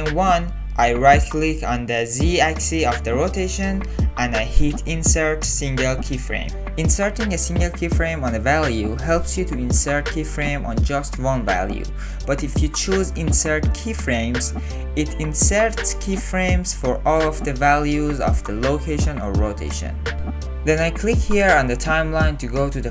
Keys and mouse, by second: 1.8-3.3 drag, 5.8 click, 7.1 click, 10.2 ctrl+z, 10.4 ctrl+z, 11.1-13.2 drag, 17.3 ctrl+z, 17.5 ctrl+z, 21.8 click.